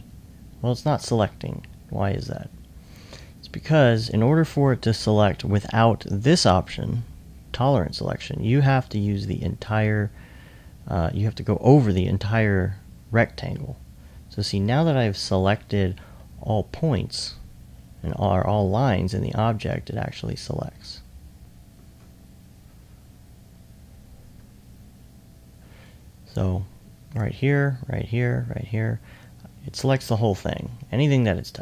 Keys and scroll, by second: 14.0 s.